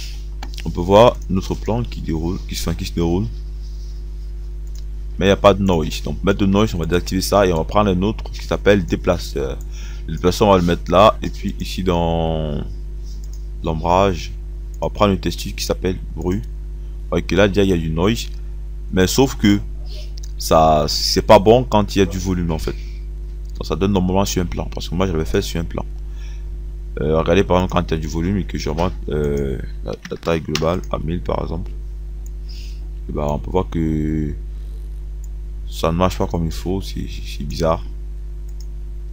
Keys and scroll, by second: 30.0 KP_1, 30.2 KP_0.